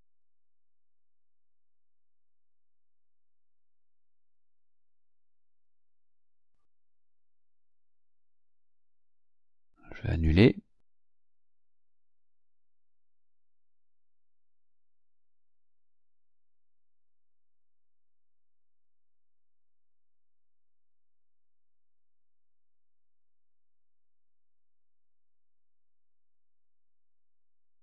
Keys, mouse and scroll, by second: 0.3-0.6 scroll down 2, 1.2 Up, 1.5 Up, 2.1 Down, 3.0 scroll up 2, 4.4 click, 5.4 click, 6.9 click, 7.9 click, 10.1 click, 11.4 click, 12.3 click, 13.8 click, 15.3 click, 16.7 click, 17.8 click, 18.7 click, 19.5 click, 20.4 click, 21.7 click, 22.7-23.7 ctrl+scroll up 2, 24.6 click, 26.4 click, 27.3 click.